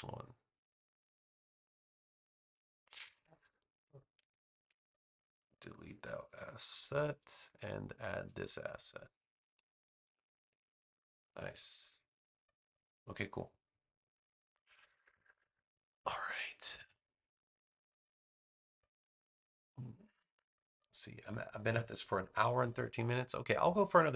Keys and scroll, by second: 0.2 a.